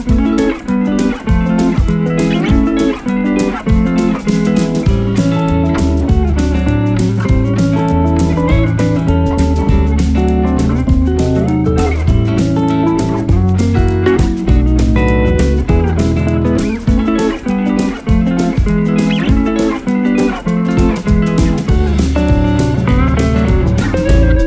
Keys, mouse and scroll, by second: 0.6 right click, 2.9 click, 6.5-7.5 scroll down 1, 7.7 alt+scroll up 1, 8.2 scroll down 1, 9.9 click, 9.9 click, 14.4 click, 18.9 click, 19.0 click, 20.8 click, 24.2-24.4 drag.